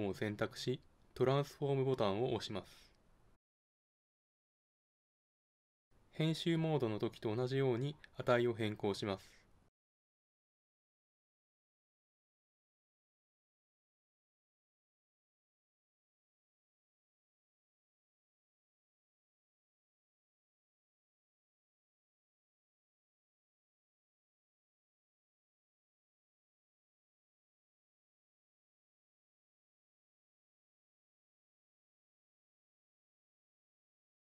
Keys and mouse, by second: 5.5-7.3 drag, 10.0-11.8 drag, 14.8 middle click, 15.8 middle click, 17.1 middle click, 19.5 click, 23.2-25.1 drag, 26.5-28.5 drag, 30.9-32.7 drag.